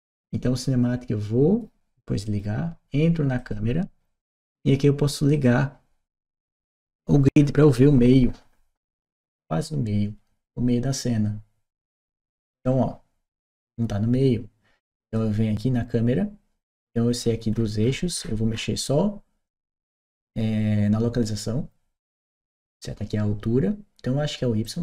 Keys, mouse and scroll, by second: 2.1 click, 3.2 click, 5.1 click, 7.1 click, 14.8 click, 17.3-18.4 middle drag, 17.3-18.4 scroll down 1, 24.5-24.8 drag.